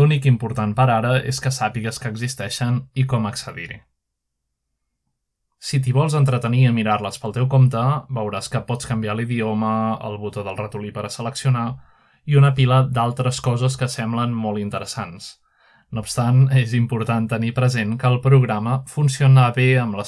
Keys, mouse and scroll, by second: 0.0 click, 0.7-1.2 scroll down 1, 1.2 click, 1.8 click, 2.5 click, 3.0 click, 3.6 click, 4.2 click, 4.7-7.8 drag, 10.0-11.0 drag, 11.1-12.2 drag, 13.6-14.4 drag, 14.5-15.6 drag, 17.5 click.